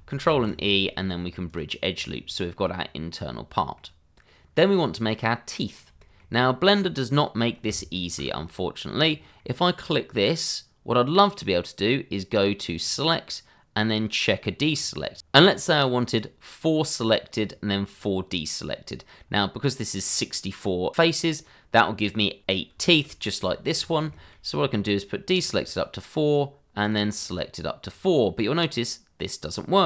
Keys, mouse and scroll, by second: 0.3 ctrl+e, 1.4 click, 2.0 middle click, 4.9-5.3 scroll up 1, 5.3 middle click, 7.9 alt+click, 8.0 click, 9.1 scroll down 1, 9.3 middle click, 12.8 click, 17.4-18.6 scroll down 1, 18.6-19.3 scroll up 1, 19.3 middle click, 22.5 scroll down 1, 22.8 shift+middle click, 23.5 middle click, 23.6 shift+middle click, 23.7-24.1 scroll up 1, 24.1 shift+middle click, 25.3 middle click, 25.3 click, 25.6 double click, 26.2 click, 27.2 double click, 28.0-28.7 scroll up 1, 28.7 middle click.